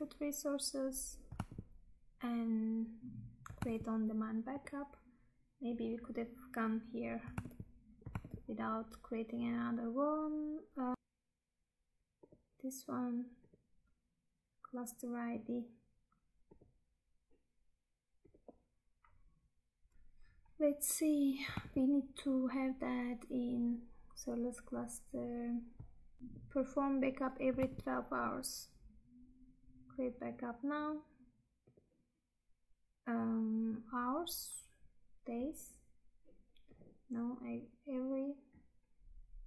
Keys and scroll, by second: 1.6 Tab, 3.7 Tab, 7.6 Tab, 10.9 Tab, 19.9 Tab, 21.7 Tab, 27.6 Tab.